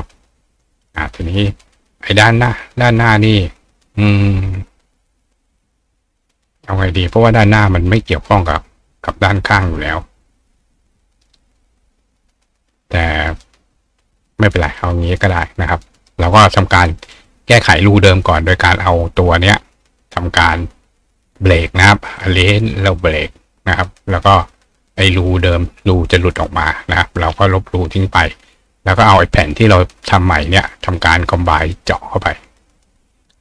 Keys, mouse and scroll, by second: 17.1 click, 22.2 click, 23.1 click, 24.6 click, 24.9 click, 25.5 click, 26.1 click, 28.1 click, 30.3 shift+click.